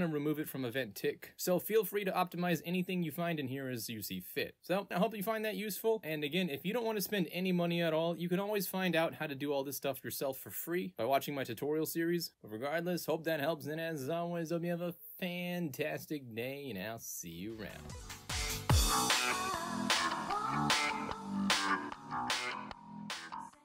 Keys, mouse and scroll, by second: 4.5 e, 4.6 e, 8.5 middle click.